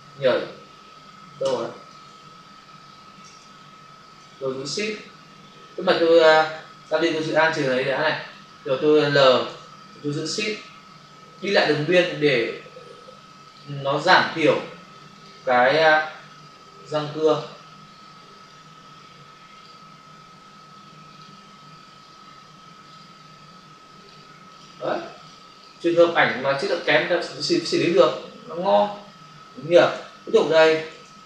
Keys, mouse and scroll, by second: 4.4 ctrl+alt+z, 6.8 w, 7.5 alt+click, 9.5 l, 11.4 shift+click, 13.4 click, 15.1 click, 17.3 click, 18.3 click, 18.4 click, 19.5 click, 19.6 click, 22.8 click, 24.5 click, 24.6 double click, 24.8 click, 25.1 double click, 25.4 click, 25.6 click, 25.7 click, 25.9 double click, 26.1 click, 26.2 click, 26.7 click, 26.8 double click, 27.7 space, 27.9 click, 28.1 space, 30.9 ctrl+alt+z.